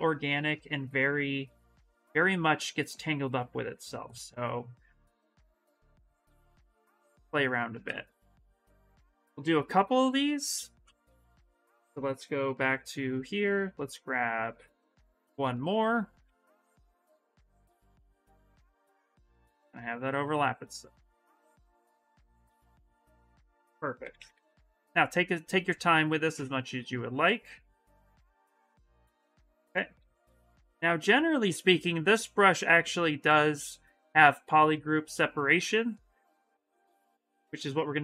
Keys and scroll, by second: 7.2 s, 8.7 b, 9.2 c, 12.4 b, 15.5 s, 21.7 ctrl+z, 23.5-25.1 typing.